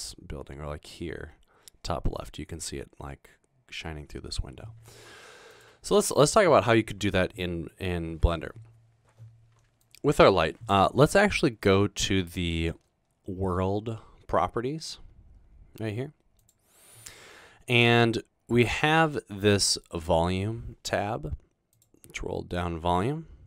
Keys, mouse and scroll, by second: 16.4 click, 21.8 click.